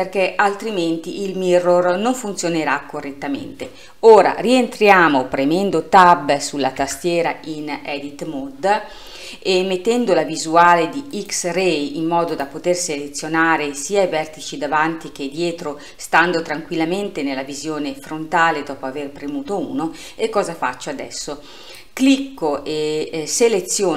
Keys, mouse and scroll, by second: 6.8 Tab, 11.2-12.4 drag, 21.8 click.